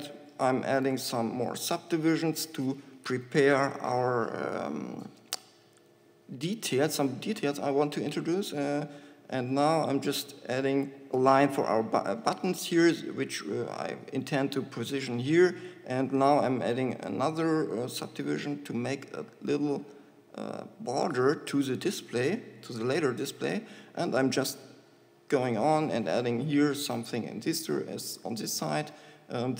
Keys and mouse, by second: 0.9 ctrl+r, 5.7-7.4 drag, 7.4 middle click, 9.6 ctrl+r, 21.6 click, 23.0 ctrl+shift+r, 28.7-29.5 drag.